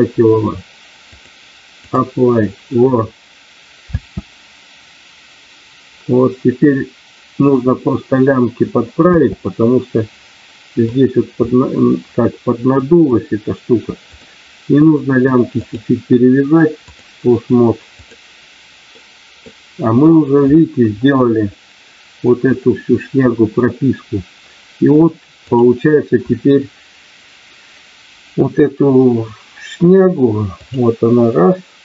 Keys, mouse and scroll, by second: 1.2 click, 3.8 space, 9.1 space, 9.5-11.0 middle drag, 11.5-13.0 middle drag, 15.6-17.0 drag, 19.0 middle click, 25.4 click, 30.4 click.